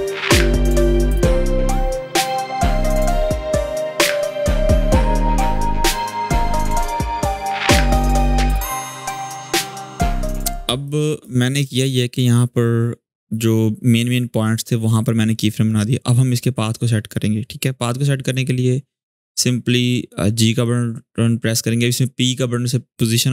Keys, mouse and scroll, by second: 0.3 v, 0.3-0.7 click, 0.7 space, 0.8 click, 0.9 space, 1.1 click, 1.7 ctrl+z, 1.9 drag, 3.0 scroll up 1, 3.2 space, 3.3 click, 3.4 space, 3.6 click, 3.9 space, 4.0 drag, 8.4 scroll down 1, 8.5-9.7 typing, 8.6 click, 8.9 click, 9.2 scroll up 1, 9.3 click, 9.7 click, 10.6-11.2 click, 10.9 space, 11.3-12.8 scroll down 1, 17.3 scroll up 1, 20.3-23.3 drag.